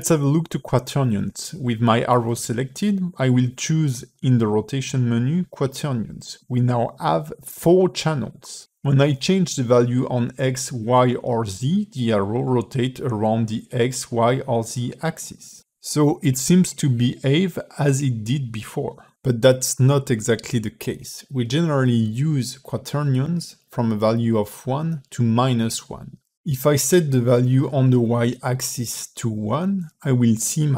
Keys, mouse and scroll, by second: 1.4 click, 5.1 middle click, 6.4 click, 9.1 alt+r, 10.2 click, 12.3 alt+r, 13.4 click, 15.7 alt+r, 19.7 click, 20.5 middle click, 23.0 click, 24.8 middle click, 26.7 click, 28.4 middle click, 29.3 click.